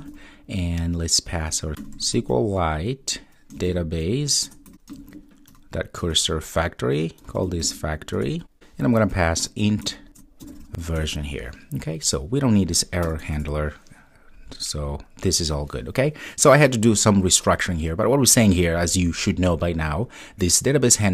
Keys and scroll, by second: 4.5 Return, 6.1 Return, 8.2 Return, 10.1 Return.